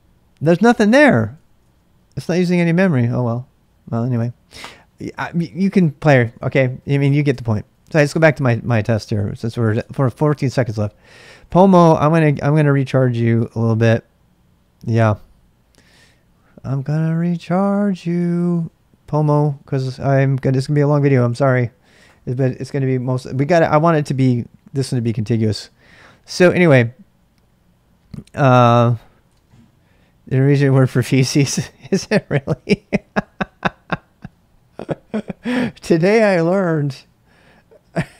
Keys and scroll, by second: 1.1-1.9 typing, 6.5-9.6 typing, 9.8 Return, 11.2-14.1 typing, 15.8-19.0 typing, 26.0-26.8 typing, 29.0-30.0 typing, 31.8 typing.